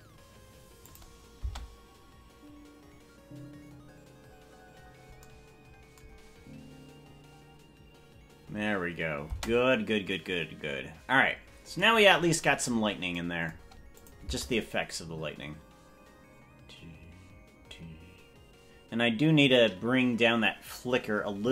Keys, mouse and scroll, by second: 1.5 space, 9.5 space, 12.5 scroll down 2, 12.7-13.1 scroll down 6, 14.1-21.5 drag, 14.5 space.